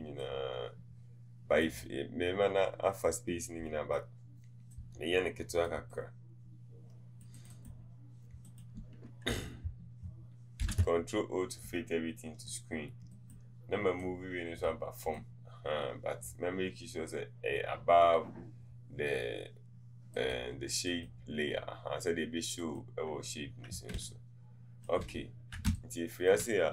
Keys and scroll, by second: 24.0 space.